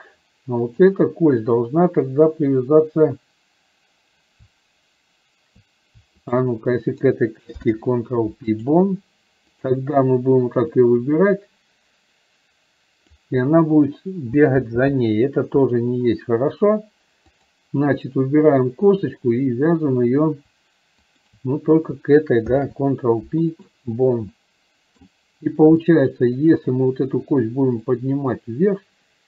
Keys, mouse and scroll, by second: 0.9 click, 6.4 shift+click, 10.8-13.4 drag, 17.4 click, 24.5-25.0 middle drag, 25.9-26.6 middle drag, 28.1-29.2 drag.